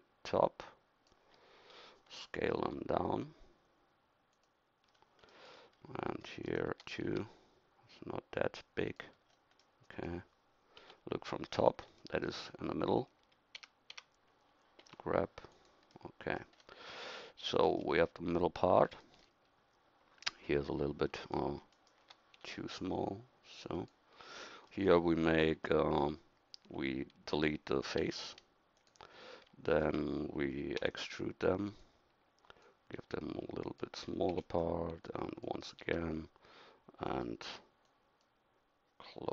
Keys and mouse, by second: 2.6 s, 4.9-7.4 middle drag, 7.0 s, 10.8 KP_7, 11.5 middle click, 13.6 a, 13.9 a, 14.8 g, 22.4 s, 23.4 click, 28.0 x, 30.8 e, 33.0 s, 34.4 e, 35.8 s.